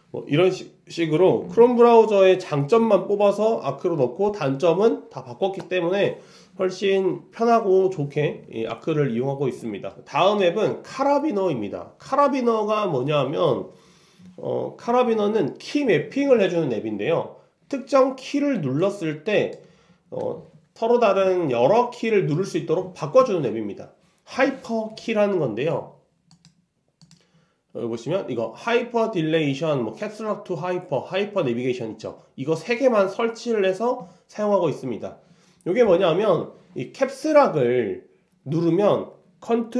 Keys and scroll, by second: 20.7 ctrl+alt+c.